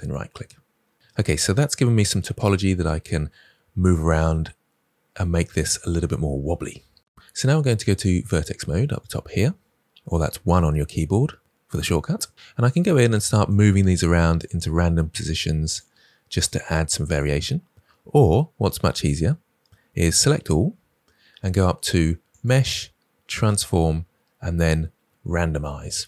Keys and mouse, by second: 8.2 click, 10.3 1, 12.6 click, 12.9 g, 13.4 click, 13.9 click, 14.0 g, 14.3 click, 15.1 click, 15.2 g, 15.6 click, 16.3 click, 16.4 g, 17.0 click, 20.1 a, 22.3-25.8 drag.